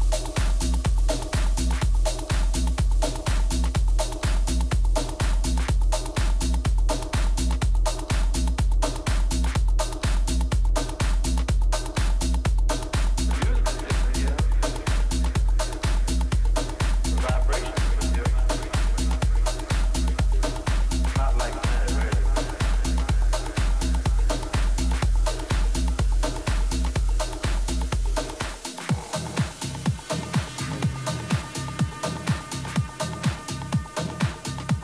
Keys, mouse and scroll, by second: 1.0-3.7 middle drag, 2.9 a, 3.7-5.1 right drag, 4.9 click, 5.6-6.7 drag, 10.0-11.8 right drag, 10.9-12.9 drag, 12.4 right click, 12.6 middle click, 13.5-15.4 right drag, 14.4-16.2 drag, 17.3-19.6 middle drag, 18.9 a, 19.6-21.5 right drag, 20.3-22.1 drag, 22.5 a, 23.0-24.9 right drag, 23.9 click, 24.9 click, 26.0-29.8 middle drag, 26.4 a, 32.2-34.1 right drag, 34.1 KP_Decimal, 34.2 middle click.